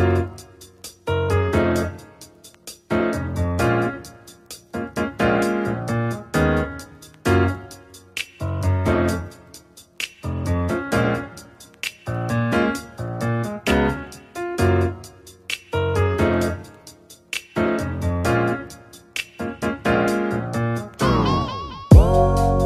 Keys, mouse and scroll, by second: 2.9-3.9 middle drag, 3.9 click, 4.8 r, 7.4-9.0 middle drag, 9.0 r, 17.3-18.0 middle drag, 18.0-18.7 scroll up 5, 18.7-20.7 middle drag, 20.7 click, 22.1 click.